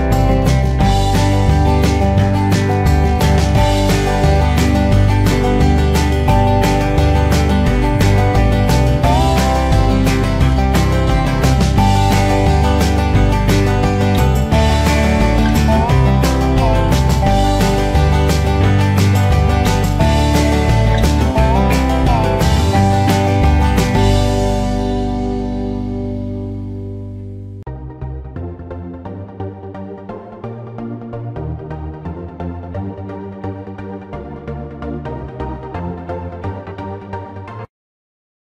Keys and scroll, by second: 2.2 ctrl+v, 10.9 ctrl+shift+s.